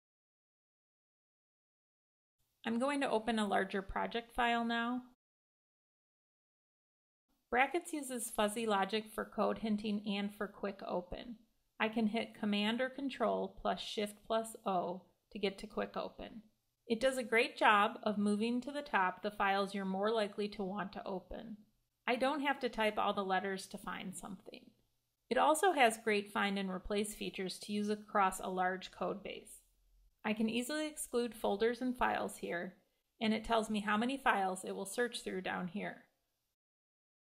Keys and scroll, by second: 12.7 shift+super+o, 24.5 Escape, 25.3 alt+shift+super+f.